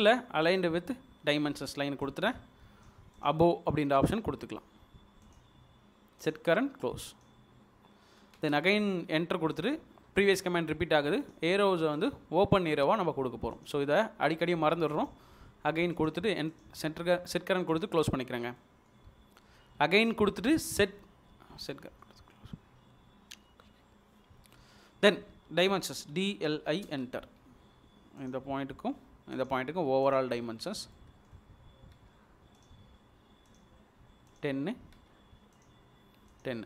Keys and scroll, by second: 8.4 space, 26.1-26.9 typing, 32.0 space.